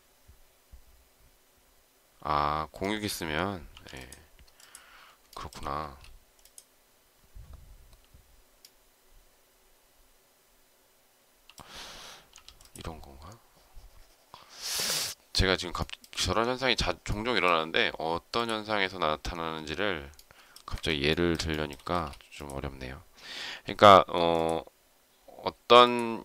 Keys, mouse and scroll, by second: 5.2 shift+middle click, 5.7 space, 14.7 Escape, 15.7 shift+middle click, 20.6 Escape, 21.4 shift+middle click, 21.8 space, 23.4 m.